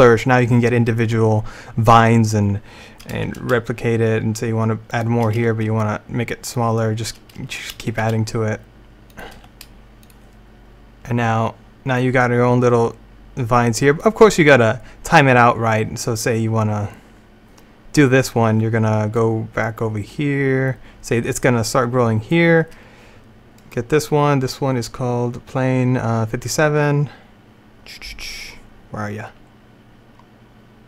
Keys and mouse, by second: 3.3 shift+d, 5.4 s, 7.9 shift+d, 9.5 r, 13.1 click, 13.9-19.2 middle drag, 19.2-21.0 drag, 30.1 middle click.